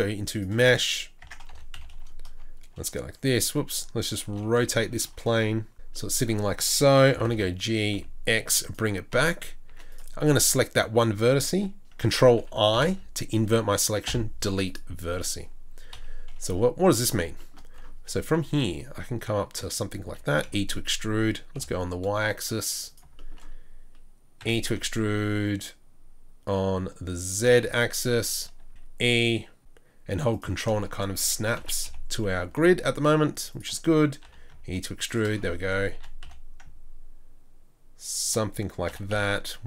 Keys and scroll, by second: 1.2 shift+a, 1.2 Tab, 1.5 r, 7.1 r, 7.2 g, 9.7 g, 10.2 1, 12.7 ctrl+i, 14.1 Delete, 15.9 KP_3, 18.2 g, 20.1 e, 24.4 e, 28.7 e, 31.6 e, 34.2 e, 36.6 ctrl+e.